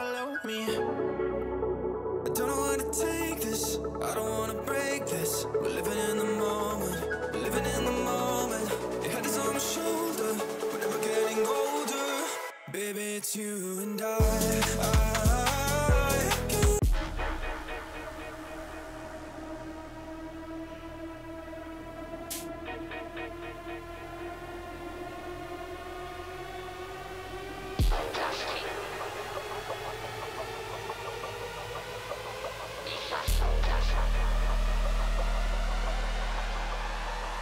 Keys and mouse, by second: 1.9 shift+middle click, 2.3 click, 2.4 Tab, 4.5 ctrl+KP_Add, 6.2 click, 7.1 click, 8.0 click, 8.3 Tab, 8.7 middle click, 9.4 click, 10.5 click, 13.1 KP_1, 13.8 click, 14.4 Delete, 15.0 z, 15.6 click, 16.0 shift+click, 16.6 ctrl+p, 17.3 z, 17.7 click, 18.6 shift+click, 19.2 ctrl+p, 19.8 z, 20.2 click, 20.6 ctrl+s, 21.2 shift+click, 21.5 shift+a, 23.7 ctrl+alt+KP_0, 24.4 g, 25.5 g, 27.9 click, 28.4 click, 31.3-33.1 drag, 36.4 click.